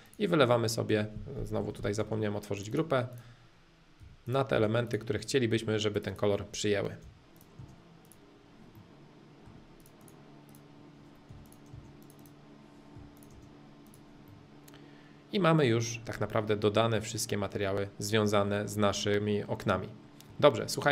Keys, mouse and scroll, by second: 0.0-1.4 drag, 1.6 ctrl+z, 2.0 space, 2.7-4.0 drag, 4.0 b, 4.2 click, 4.5 space, 4.8-6.8 drag, 7.0 b, 7.3 click, 7.6 space, 8.0 click, 8.7-9.8 middle drag, 9.8-11.3 drag, 11.3 b, 11.4 click, 11.7 space, 12.0 click, 12.9 b, 13.1 click, 13.3 space, 13.8 click, 14.3-18.3 middle drag, 18.9-20.9 middle drag.